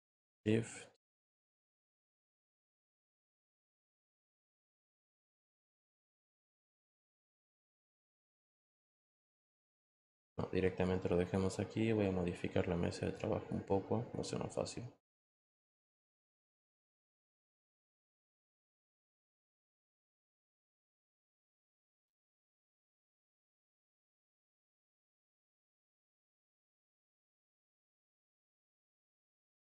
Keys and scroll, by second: 6.7 ctrl+t.